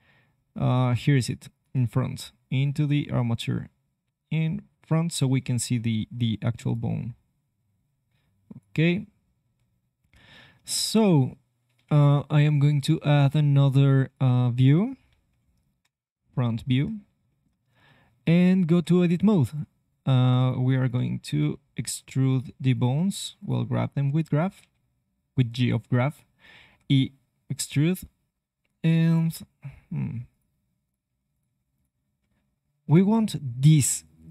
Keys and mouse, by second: 1.1-3.5 middle drag, 4.8-8.9 middle drag, 10.2-11.3 middle drag, 11.7 KP_3, 15.2 n, 15.8 KP_1, 16.5 middle click, 16.7 middle click, 18.6 Tab, 19.8 g, 21.3 g, 22.2-26.9 drag, 22.9 g, 24.5 g, 29.2 e, 30.8-32.6 drag, 31.0 g, 32.1 g.